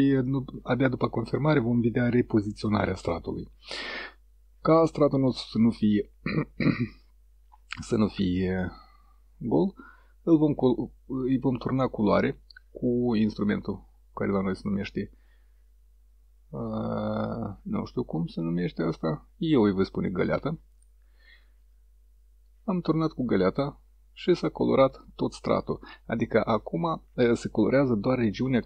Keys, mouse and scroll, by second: 9.6 click, 21.7 click.